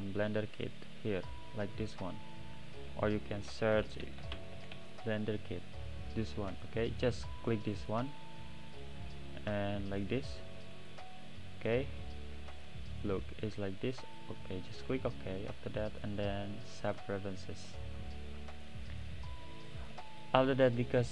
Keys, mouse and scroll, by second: 20.1 drag, 20.7-21.1 middle drag.